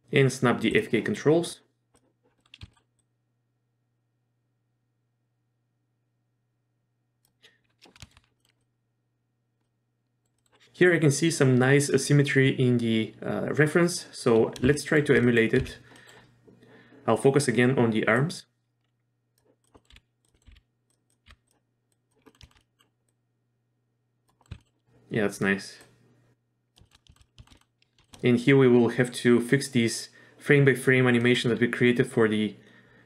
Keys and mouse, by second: 0.7 click, 2.4 middle click, 2.6 z, 2.7 middle click, 3.0-7.2 drag, 8.0 shift+middle click, 8.4 middle drag, 8.6 middle click, 9.6-10.2 middle drag, 10.4 middle click, 14.7 shift+middle click, 15.2 middle click, 15.6 z, 16.0 middle click, 18.2-19.4 drag, 19.7 middle click, 19.9 r, 20.3 middle click, 20.5 r, 21.2 r, 21.9 click, 22.3 middle click, 22.4 shift+middle drag, 22.6 middle drag, 23.1-24.3 drag, 24.4 middle drag, 24.5 z, 24.6 middle click, 25.9-26.8 drag, 26.8 shift+middle click, 27.1 shift+middle click, 27.4 shift+middle click, 28.0 shift+middle click, 31.2 middle click.